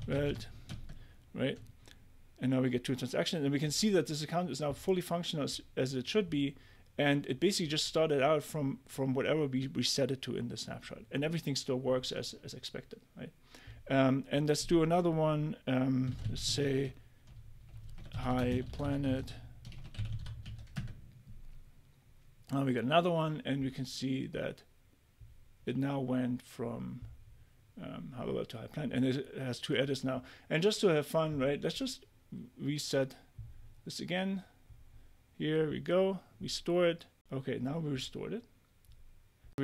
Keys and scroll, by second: 0.0-0.8 typing, 15.8-20.9 typing.